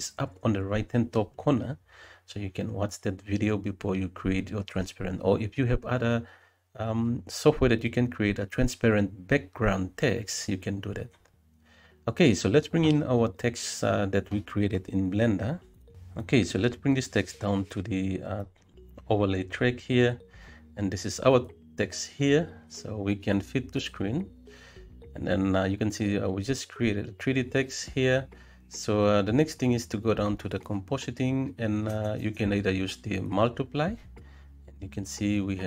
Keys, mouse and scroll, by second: 0.0 middle click, 0.4 middle click, 0.9 g, 1.2 z, 2.0 g, 2.1 y, 2.5 middle click, 3.6 KP_0, 5.1 n, 5.6 click, 6.2 click, 7.1 n, 8.6 click, 9.5 click, 10.1-11.5 right drag.